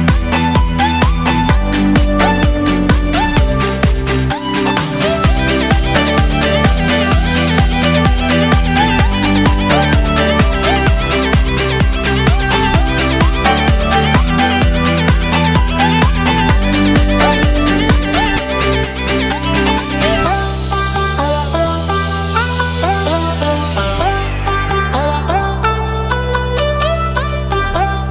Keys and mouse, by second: 3.1 click, 4.8 middle click, 6.9 shift+click, 7.7 shift+middle click, 10.2 click, 12.8 click, 13.2 click, 14.3-15.5 drag, 15.9 click, 17.9 click, 18.5 middle click, 18.7 click, 18.9 click, 19.4 click, 19.8 middle click, 20.6 KP_0, 21.0 click, 21.6 s, 22.8-24.2 drag, 24.2 middle click, 25.8 KP_0, 25.8 click, 26.4 click, 26.8 middle click, 27.0 KP_0.